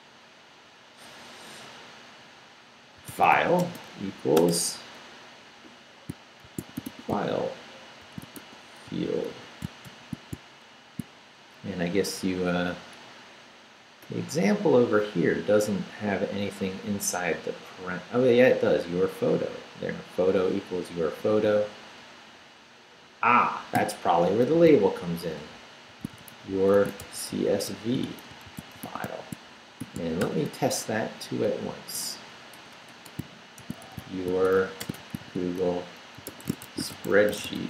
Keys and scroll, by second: 2.8-4.4 typing, 6.2-9.9 typing, 23.7-30.2 typing, 30.9 shift+Up, 31.2 Left, 32.5-37.6 typing.